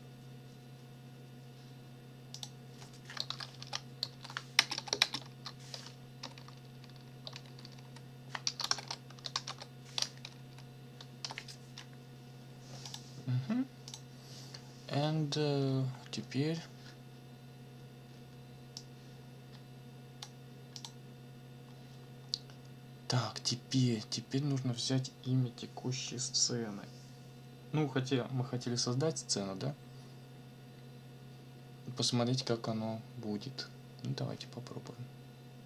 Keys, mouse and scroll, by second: 2.3 click, 3.3 shift+', 3.6 ctrl+shift+v, 4.1 ctrl+shift+', 4.6 ctrl+shift+space, 4.7 ctrl+shift+t, 4.9 ctrl+shift+o, 5.0 ctrl+shift+space, 6.4 BackSpace, 8.3-11.2 typing, 12.8 click, 13.9 click, 18.8-20.4 drag, 20.7 click.